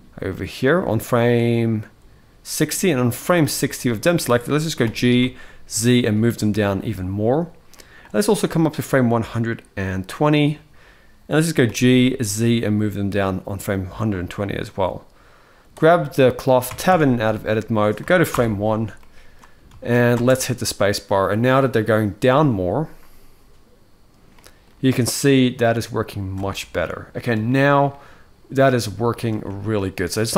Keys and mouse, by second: 1.1-3.1 drag, 3.4 middle click, 4.6 g, 7.7-9.8 drag, 11.4 g, 15.5 click, 16.4 Tab, 16.8 Tab, 18.1 shift+Left, 18.7-19.1 middle drag, 19.5 ctrl+s, 19.9 space, 21.1-21.5 middle drag, 24.2 middle click, 26.1 space, 26.3-27.0 middle drag, 27.2-29.0 shift+middle drag, 29.1-29.4 shift+middle drag.